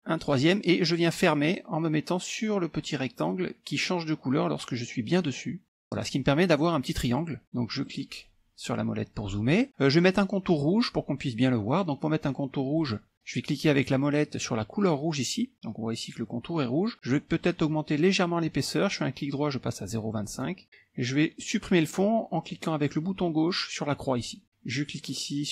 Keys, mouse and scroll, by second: 0.1 click, 5.7 click, 7.5 middle click, 8.1 scroll up 1, 12.8 middle click, 20.4 click, 24.2 click.